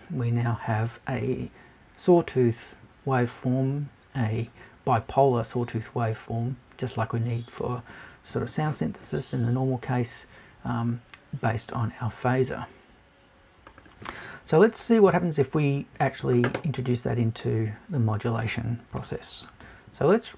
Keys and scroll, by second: 15.1 BackSpace, 19.0 BackSpace.